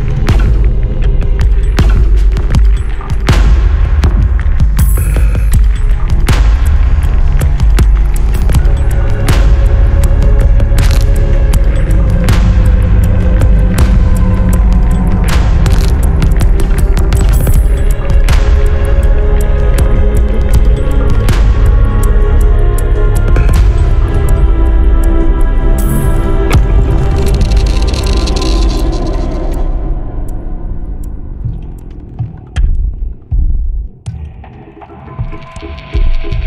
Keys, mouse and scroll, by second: 0.5 click, 0.9 click, 1.2-2.8 drag, 3.0-3.3 scroll up 1, 3.8-4.2 scroll down 1, 5.4 click, 7.6 click, 8.3 click, 9.7-10.1 scroll up 1, 10.4 scroll down 2, 10.8-12.3 drag, 12.7 1, 13.2-13.6 scroll down 2, 13.8-14.2 scroll up 2, 14.3-16.1 drag, 16.3 1, 16.9 scroll down 2, 17.4 scroll up 2, 19.2 click, 20.5 click, 21.8-22.1 scroll down 2, 22.3 scroll up 2, 22.8 scroll down 2, 23.2 scroll up 2, 23.6 scroll down 2, 25.1 click, 27.1 click, 29.2 click, 32.7 click, 34.0 scroll up 2.